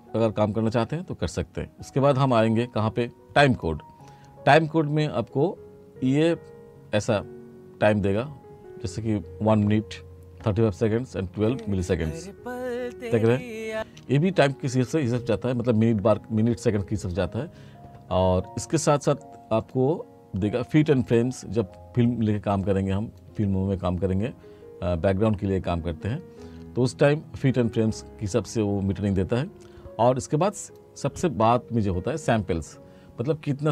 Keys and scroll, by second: 11.4 space, 13.8 space.